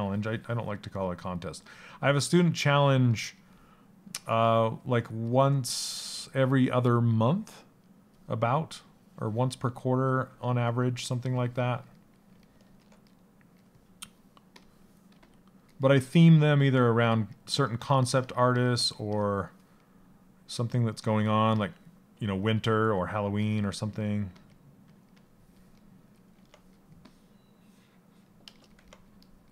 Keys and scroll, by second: 3.9 s, 23.8 s.